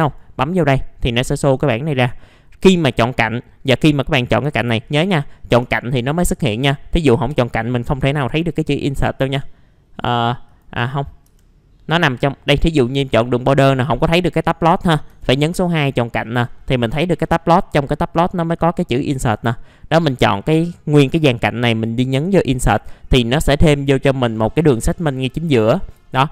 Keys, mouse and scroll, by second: 11.2 3, 15.1 2, 19.5-22.7 drag, 22.7 scroll down 1, 22.8 middle click, 23.6 alt+middle click, 24.6-26.0 scroll up 1, 26.0 alt+middle click.